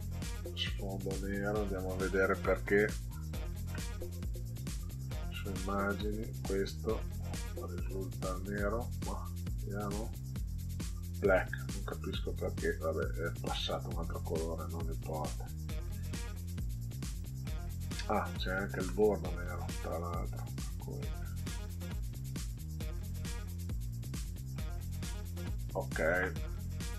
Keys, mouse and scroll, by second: 3.1 click, 4.5 click, 5.7 click, 9.7 click, 13.5 click, 16.4 click, 18.1 click, 19.6 click, 21.4 click, 22.4 click, 25.1 click, 26.4 middle click.